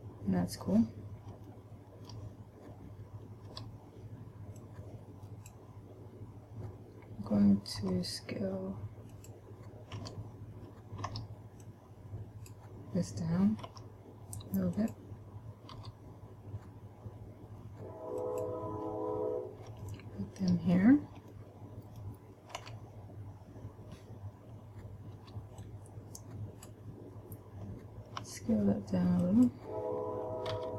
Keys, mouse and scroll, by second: 1.8 shift+middle click, 3.9 b, 8.2 s, 9.6 click, 10.3 a, 11.4 b, 14.1 s, 15.2 click, 16.2 g, 18.8 click, 20.2 shift+middle click, 21.2-21.7 scroll up 1, 21.7 middle click, 23.1 a, 25.5 b, 28.6 s, 29.8 click.